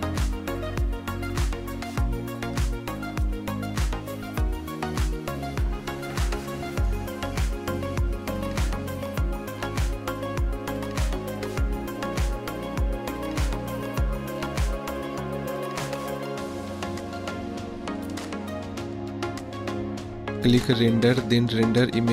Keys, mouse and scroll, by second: 1.5 click, 1.8 middle click, 2.2 KP_0, 5.5 click, 7.3 KP_0, 9.0-10.6 drag, 9.7 KP_0, 21.2-22.1 drag.